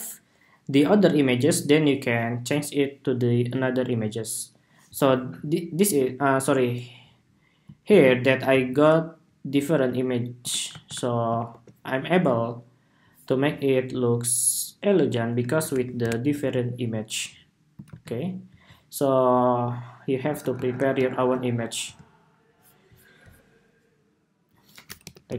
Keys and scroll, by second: 7.6 super+c, 10.4 shift+super+v, 11.2 super+2, 16.0 super+Tab, 17.6 super+c, 20.2 shift+super+v, 20.9 super+2.